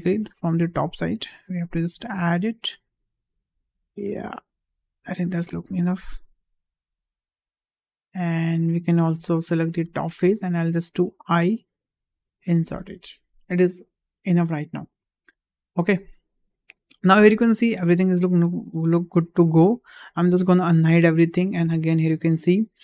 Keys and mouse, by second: 0.7-7.8 drag, 8.6 click, 9.4 3, 11.0 i, 12.9 click, 14.0 shift+middle click, 14.4 middle click, 15.0 shift+middle click, 15.4 middle click, 16.4 `, 17.6 shift+middle click, 18.4 shift+middle click, 18.7 Tab, 20.7 alt+h, 22.4 shift+middle drag.